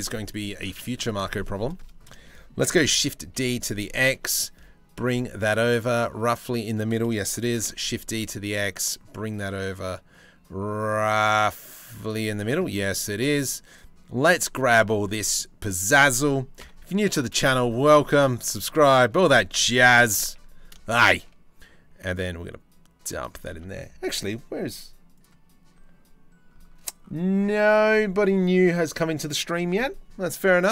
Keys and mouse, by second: 0.0 shift+middle click, 0.4 shift+middle click, 2.3 shift+d, 7.0 shift+d, 13.9 c, 16.2 ctrl+l, 17.1 z, 18.8 click, 19.7 g, 23.2 Tab.